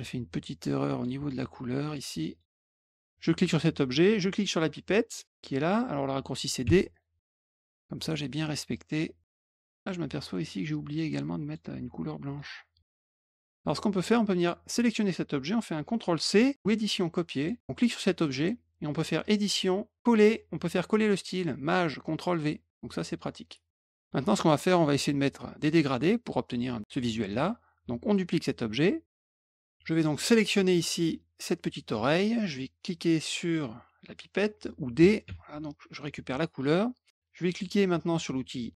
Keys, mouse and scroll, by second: 0.0 ctrl+click, 1.2 middle click, 1.8 click, 2.3 click, 6.9 click, 7.6 click, 7.8 click, 8.7 click, 9.6 middle click, 10.2 click, 11.4 click, 12.2 click, 12.9 shift+click, 13.5 click, 14.3 click, 16.5 click, 17.3 click, 18.2 click, 19.2 click, 22.2 click, 23.6 click, 23.9 middle click, 29.3 click, 29.5 click, 30.2 click, 35.2 d, 36.2 click.